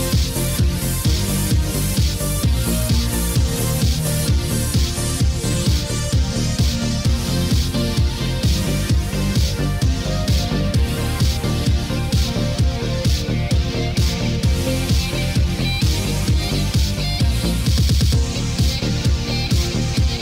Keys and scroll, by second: 4.5 ctrl+z, 6.4 ctrl+d.